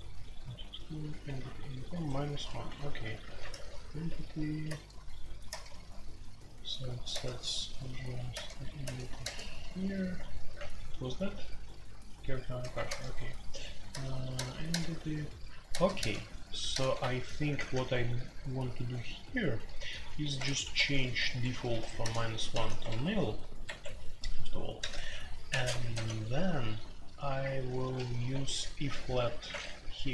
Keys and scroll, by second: 1.1 typing, 2.7-3.4 typing, 3.5 alt+n, 4.6 alt+n, 4.6 typing, 5.5 alt+n, 7.1 alt+n, 8.3 alt+n, 8.8 alt+n, 9.2 alt+n, 10.5 alt+p, 12.8 alt+n, 13.9 alt+n, 14.7 alt+n, 17.4-22.5 typing, 22.8 Escape, 23.6 Escape, 23.8 F2, 24.5-25.9 typing, 27.6-29.0 typing, 29.5 Escape.